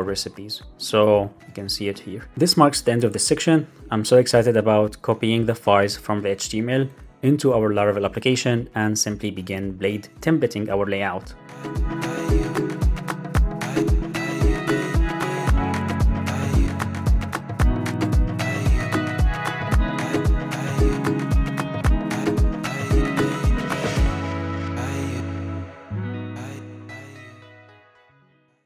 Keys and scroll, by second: 1.4 super+r.